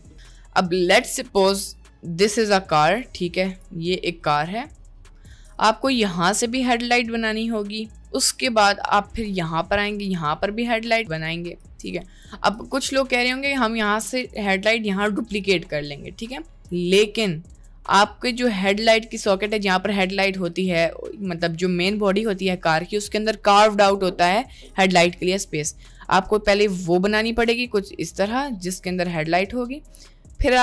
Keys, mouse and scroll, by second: 2.5 click, 3.7-5.3 drag, 6.4-8.0 drag, 9.3-10.9 drag, 11.7 click, 13.2 ctrl+z, 15.4-16.8 ctrl+drag, 17.2 click, 18.3 click, 27.5-29.9 drag.